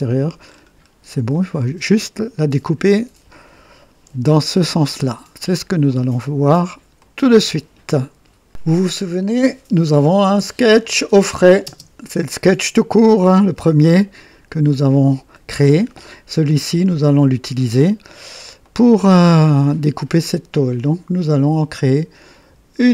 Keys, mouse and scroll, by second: 0.4-1.1 scroll down 2, 1.3-2.2 drag, 2.4 typing, 4.0 KP_3, 5.4 scroll down 1, 5.8-6.8 drag, 6.9 click, 7.5 typing, 10.7 click, 11.6 space, 13.2-15.5 drag, 16.4-17.6 drag, 18.5 click.